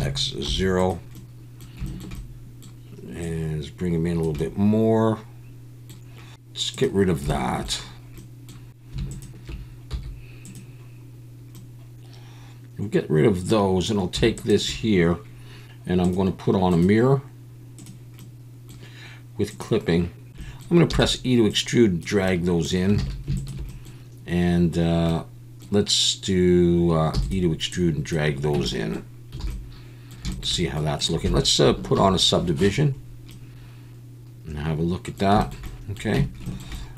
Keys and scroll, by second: 0.4 0, 9.9 x, 20.3 ctrl+z, 20.4 ctrl+z, 20.9 e, 23.1 alt+a, 27.1 e, 28.5 Tab, 29.5 alt+a, 32.0 ctrl+1, 36.2 Tab.